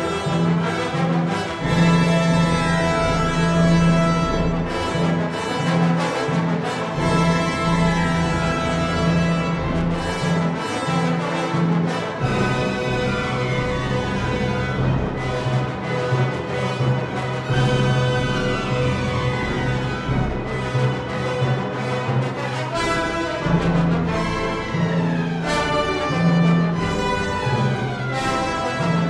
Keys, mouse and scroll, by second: 0.8 Tab, 1.6 s, 2.4 click, 2.5 Tab, 6.4 ctrl+r, 9.1 click, 9.6 ctrl+r, 12.3 click, 13.3 ctrl+r, 15.5 click, 16.0 Tab, 17.3 Tab, 20.3 click, 21.6 2, 22.3 alt+click, 24.1 shift+a, 24.2 shift+s, 27.8 click.